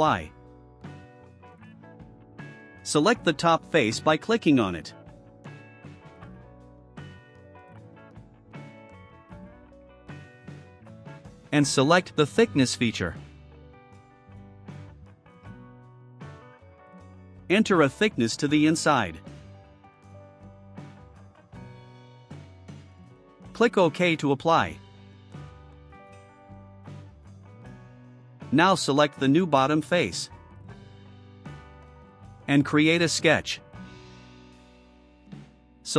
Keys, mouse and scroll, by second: 0.9 click, 4.6 click, 6.2 click, 7.8 right click, 9.9 click, 15.1 click, 17.0 2, 18.4 click, 19.4 click, 26.1 click, 30.9 click, 34.0 click.